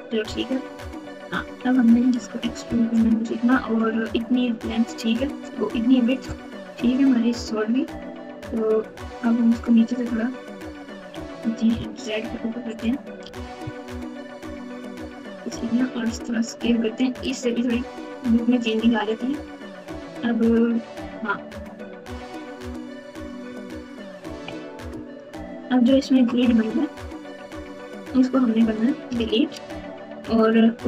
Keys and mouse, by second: 0.2 KP_1, 1.0-1.5 KP_Subtract, 2.1 e, 10.7 g, 13.2 g, 15.7 s, 23.9 ctrl+KP_2, 24.3 ctrl+KP_2, 24.4 ctrl+KP_2, 24.9 KP_Add, 25.8 KP_Add, 26.4 KP_2, 26.6 KP_2, 27.3 KP_7, 27.7 KP_9, 29.0 KP_Add, 29.4 KP_Add, 29.5 KP_Add, 30.2-30.8 ctrl+KP_2.